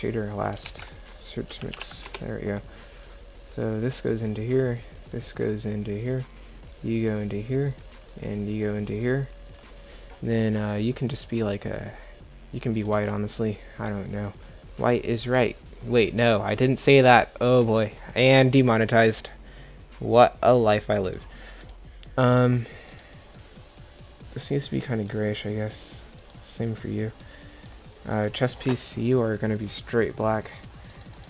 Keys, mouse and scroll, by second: 0.7 shift+a.